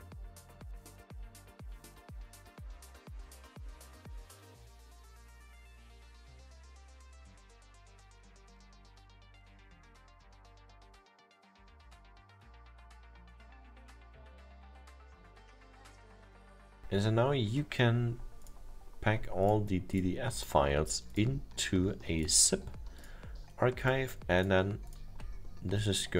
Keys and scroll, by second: 2.5 ctrl+w, 7.1 ctrl+w, 11.4 ctrl+w, 16.4 ctrl+w.